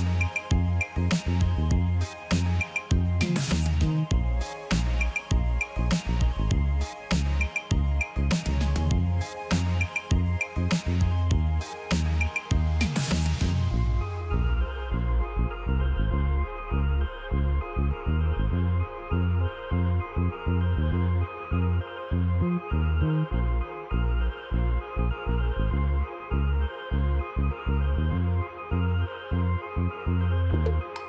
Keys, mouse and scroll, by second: 0.9 ctrl+t, 2.5 alt+click.